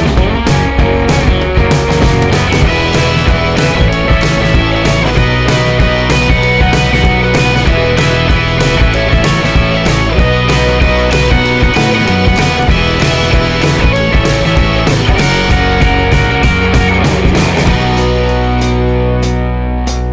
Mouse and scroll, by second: 1.7 click, 5.5 click, 6.9 click, 9.4 click, 10.4 click, 12.2 click, 13.6 click, 14.9 click, 16.2 click, 17.7 click, 18.2 click, 19.2 click.